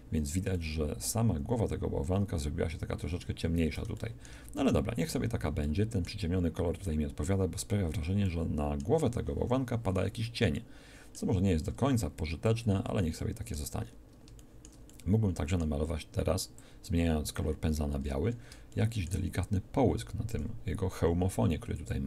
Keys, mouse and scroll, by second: 8.3-11.5 middle drag, 12.3 middle click, 12.7 click, 18.1 middle click, 18.1 click, 20.3 shift+f.